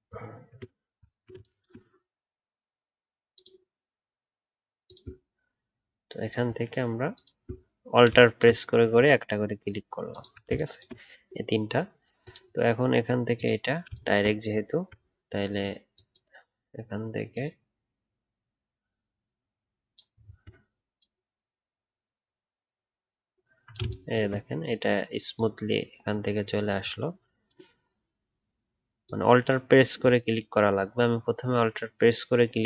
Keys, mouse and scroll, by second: 1.1 alt+scroll down 1, 4.8 alt+click, 14.6-17.6 alt+scroll down 1, 20.2 alt+scroll up 1.